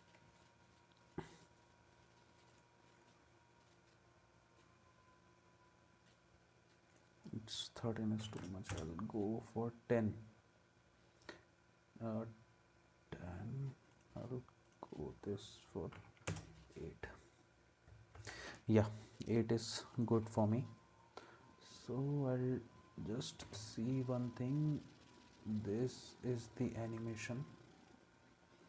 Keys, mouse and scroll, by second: 8.0-8.9 typing, 15.9 typing, 16.3 Return, 18.1 ctrl+s, 23.4 space.